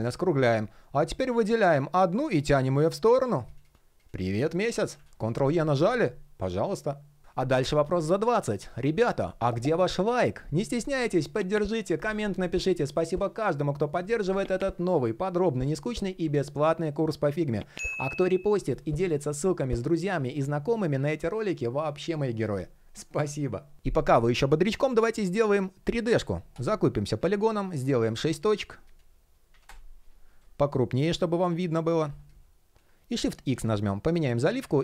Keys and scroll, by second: 4.6 super+y, 33.1 shift+4.